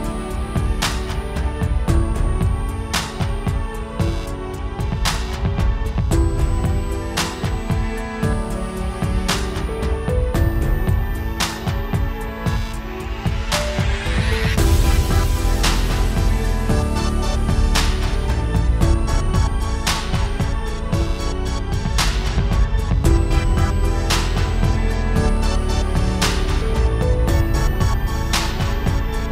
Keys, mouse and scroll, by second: 0.0 click, 0.3-0.7 scroll down 4, 0.4 shift+middle click, 0.6 shift+middle click, 0.7-1.3 scroll up 2, 0.8 middle click, 1.3 click, 1.6 s, 2.5 alt+a, 2.6-2.9 scroll up 2, 2.7 middle click, 3.0 click, 3.2 scroll down 1, 3.3 Tab, 3.5 click, 3.7 click, 4.4 click, 6.2 click, 7.0 Tab, 7.0 click, 7.1 scroll up 1, 7.2 alt+a, 7.3 click, 7.4 middle click, 7.7 click, 8.7 s, 9.0 middle click, 9.4 click, 10.4 middle click, 10.7 click, 11.6 middle click, 11.8 alt+a, 11.9 click, 12.3 Tab, 12.4 click, 12.9 click, 14.1 click, 14.9 middle click, 15.3 click, 15.6 click, 16.4 middle click, 16.7 click, 18.1 scroll down 1, 18.2 middle click, 18.3 scroll up 1, 18.5 click, 19.2 Tab, 19.5 alt+a, 19.5-20.1 scroll down 9, 19.7 middle click, 20.0 middle click, 20.1 scroll up 1, 20.5 scroll down 1, 20.6 middle click, 20.8 scroll up 2, 21.5 click, 21.9 click, 22.3 click, 22.5 click, 22.8 click, 23.7 Delete, 23.9-24.3 scroll down 4, 24.3 click, 24.7 click, 25.6 click, 25.7 ctrl+space, 25.9-26.3 scroll up 1, 26.4 middle click, 27.7 Return, 28.0 alt+a, 28.4 click.